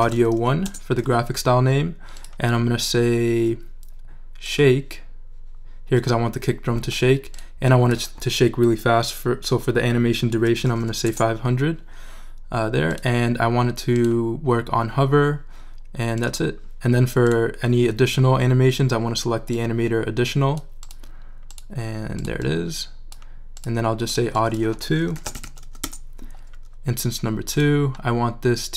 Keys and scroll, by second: 0.0-0.9 typing, 10.2-11.2 typing, 24.7-26.1 typing.